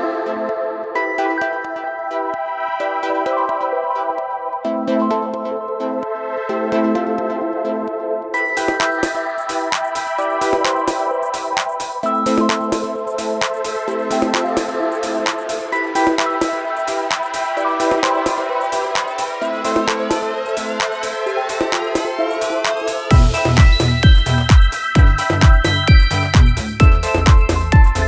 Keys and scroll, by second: 3.1 ctrl+z, 23.0 ctrl+z, 23.1 ctrl+z.